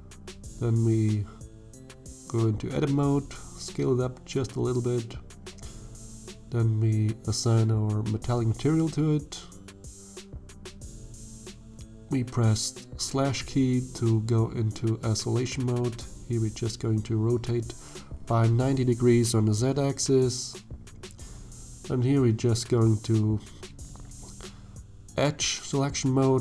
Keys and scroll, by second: 1.9 s, 10.4 /, 14.6 r, 15.7 z, 16.3 9, 16.6 0, 17.0 Return, 20.6 alt+a.